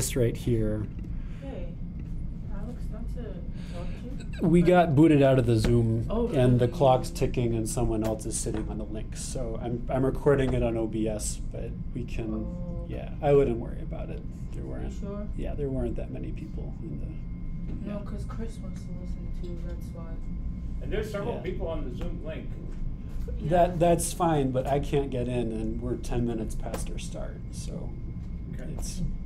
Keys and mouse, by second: 1.9-29.2 drag.